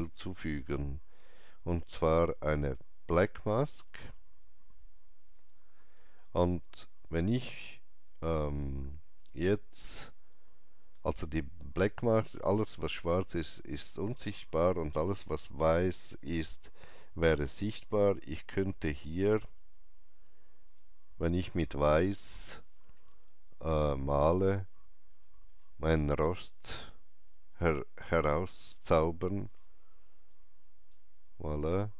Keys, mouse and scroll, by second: 3.5 click, 3.5 right click, 18.3-23.1 drag, 18.3 right click, 24.5 click, 24.5 scroll up 1, 30.2-31.9 drag, 30.2-30.5 scroll up 1.